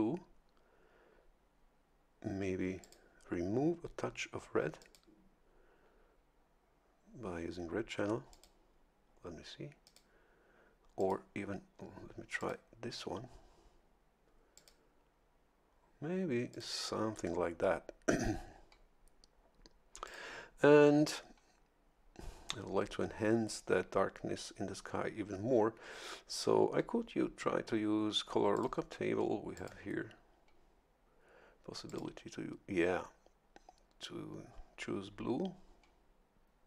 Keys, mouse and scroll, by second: 2.8 click, 4.8 click, 8.3 click, 9.8 click, 11.0 click, 12.4 click, 14.5 click, 16.5 click, 20.0 click, 28.5 click, 29.5 click, 31.9 click.